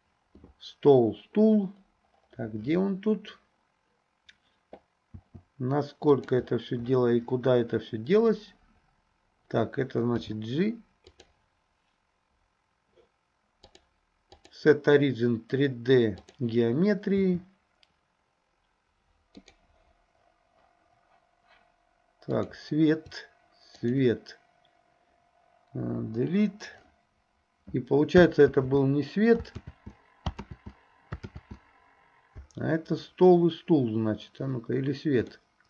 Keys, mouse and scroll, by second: 5.2 s, 10.3 g, 13.8 click, 17.2 s, 22.3 click, 23.8 shift+click, 26.0 Delete, 28.6 ctrl+z, 29.7 ctrl+z, 30.5 ctrl+z, 31.4 ctrl+z, 35.3-35.6 shift+middle drag.